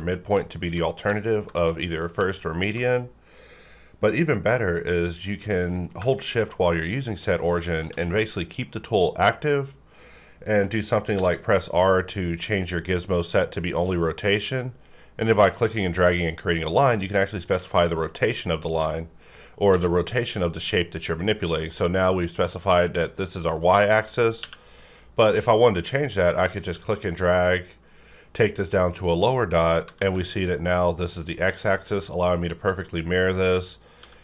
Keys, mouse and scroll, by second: 11.2 r, 14.0-19.7 drag, 19.7 alt+x, 24.0 right click, 24.4 q, 25.3-30.0 drag, 30.0 alt+x, 31.8-34.0 drag, 34.0 x.